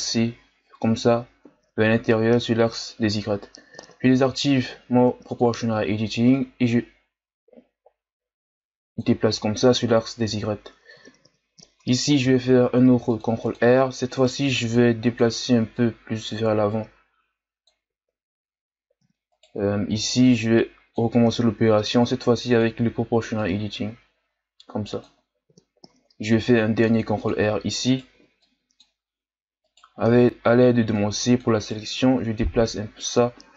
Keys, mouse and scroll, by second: 5.3-12.2 drag, 12.2 ctrl+r, 14.1 right click, 14.4 b, 15.7-19.3 drag, 19.3 right click, 19.9 b, 22.4-26.3 drag, 26.3 ctrl+r, 27.8 right click, 28.1 b, 29.6 right click, 30.0 c, 32.0 g.